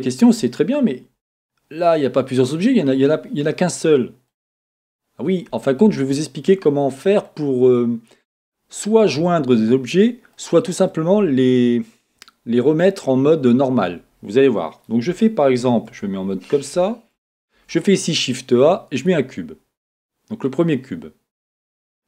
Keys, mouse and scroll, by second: 4.4-4.9 scroll up 2, 5.6-6.2 scroll down 3, 15.9 Tab, 17.5 shift+a, 19.4-19.9 scroll down 2, 19.9-22.0 middle drag.